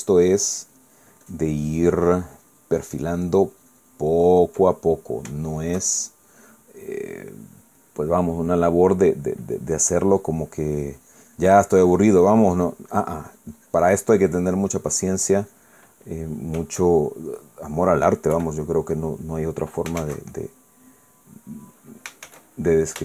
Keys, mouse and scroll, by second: 0.9-5.6 ctrl+drag, 5.6 ctrl+middle click, 6.5-7.5 shift+middle drag, 7.8-9.3 middle drag, 9.5 click, 10.6-13.2 drag, 13.3 middle click, 13.9-16.9 drag, 16.9 middle click, 17.8-18.9 shift+middle drag, 19.3 KP_1, 21.0 shift+z.